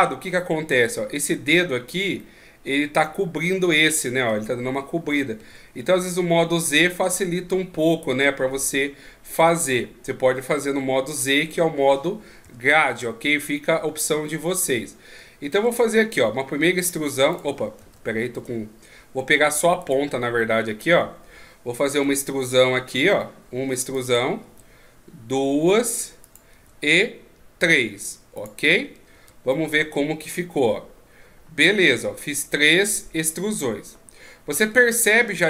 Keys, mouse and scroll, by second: 0.0 z, 2.2 middle click, 3.5 middle click, 5.4 z, 12.4 KP_1, 12.9 z, 13.5-14.0 scroll up 2, 14.0 z, 15.5 e, 17.8 ctrl+z, 18.4-18.8 scroll down 2, 18.8 scroll up 1, 19.8 right click, 22.1 e, 24.5 e, 26.5 e, 29.1 z, 29.5 middle click.